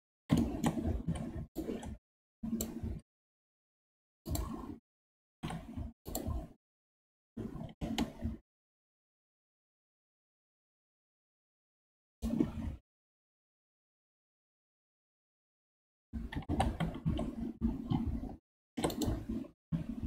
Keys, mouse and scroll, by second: 1.0 2, 1.5 click, 2.9 x, 5.2 ctrl+r, 12.9 KP_1, 14.4-16.3 middle drag, 16.3 g, 19.7 KP_5.